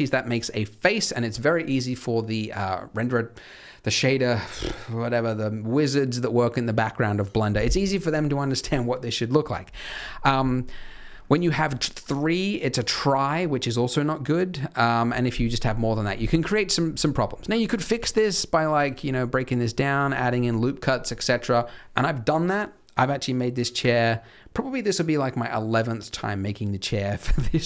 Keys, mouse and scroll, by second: 9.9-10.3 scroll down 1, 10.3-10.6 scroll up 2, 10.6-12.9 scroll down 2, 11.0-12.9 scroll up 1, 12.9-13.3 scroll up 1, 15.4-15.7 scroll up 2, 15.7-16.3 scroll down 6, 16.3 click, 16.9 middle click, 17.6 click, 17.9 click, 19.9 click.